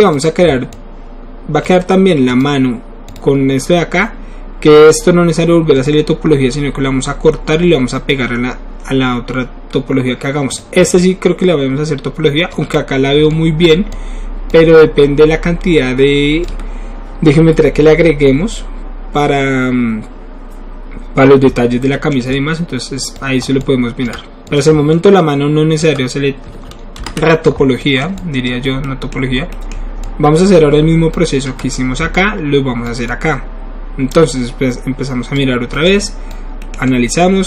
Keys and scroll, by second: 27.0 ctrl+alt+s, 32.0 typing.